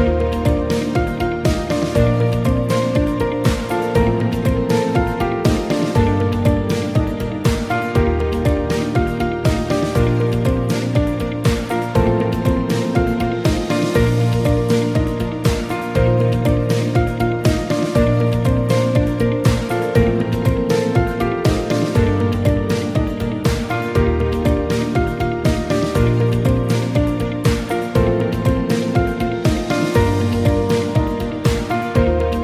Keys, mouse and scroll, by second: 2.9-6.1 right drag, 7.2-8.6 right drag, 12.6 click, 13.8-14.3 scroll down 1, 16.5-16.9 scroll down 1, 17.6-18.1 scroll down 1, 20.7-21.4 scroll down 1, 22.3 ctrl+v, 24.0 right click, 24.9-25.3 scroll down 1, 25.8-26.4 scroll down 1, 26.9 ctrl+v, 28.2 ctrl+Return, 31.3 right click, 32.2 right click.